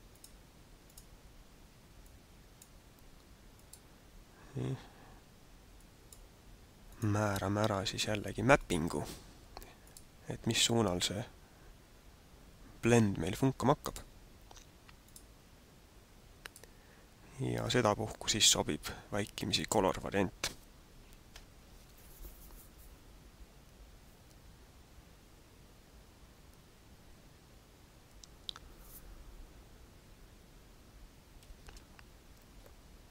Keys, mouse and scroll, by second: 0.1 click, 0.9 click, 5.7 click, 6.9 click, 8.5 click, 9.8 click, 14.0 click, 16.5 click, 31.5 Escape.